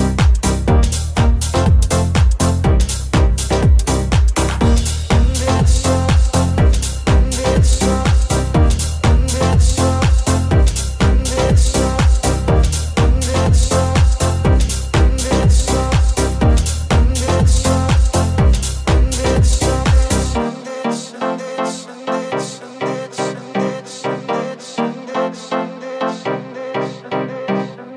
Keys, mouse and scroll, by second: 0.7 alt+click, 0.7 alt+z, 1.0 g, 1.5-4.7 ctrl+middle drag, 4.2 Tab, 4.7-8.8 ctrl+middle drag, 8.8 right click, 8.8-10.0 middle drag, 9.0 Tab, 10.0 right click, 10.1 shift+middle click, 10.4 shift+right click, 10.5-11.6 shift+middle drag, 11.6 right click, 11.7 shift+middle click, 12.0 right click, 12.0-13.9 middle drag, 12.3 j, 12.4 right click, 13.5 g, 14.1-17.8 middle drag, 16.3 g, 17.5 Tab, 17.8-19.8 middle drag, 19.8-21.8 middle drag, 20.0 Tab, 21.7 3, 21.8 right click, 21.9-25.3 shift+middle drag, 22.2 right click, 24.3 w, 25.3 s, 26.8 e, 27.5 s.